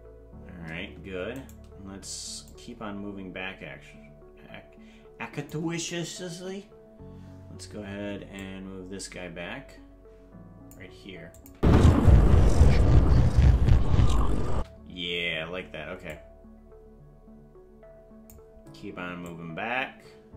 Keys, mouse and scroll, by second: 1.5 right click, 2.5-5.6 drag, 6.4 Right, 8.4-10.8 drag, 11.4 click, 11.5 space, 14.5 space, 16.1-18.4 drag, 19.2-20.3 drag.